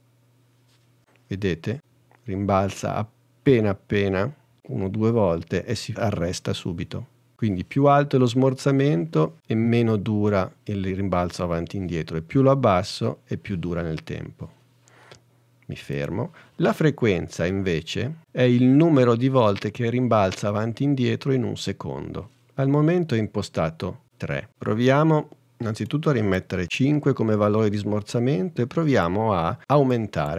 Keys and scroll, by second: 27.6 5.